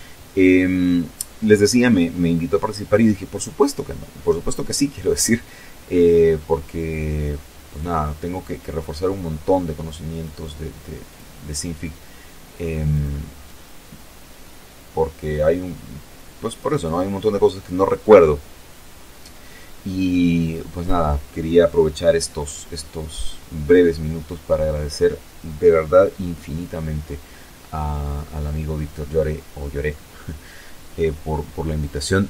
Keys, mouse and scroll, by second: 5.5-8.1 drag, 8.8 click, 10.6 click, 11.1 click.